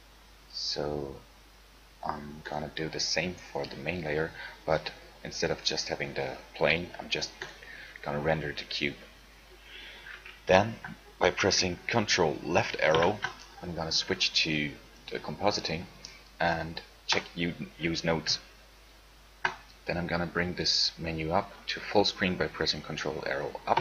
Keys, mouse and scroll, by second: 0.0 Escape, 13.1 ctrl+Left.